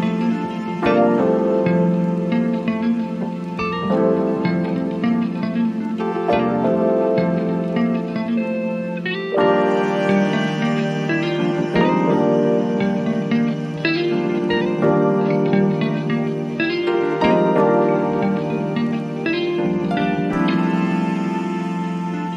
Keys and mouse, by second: 2.7-6.1 drag, 6.5 click, 8.8-12.5 drag, 12.9-18.4 drag, 19.0 click.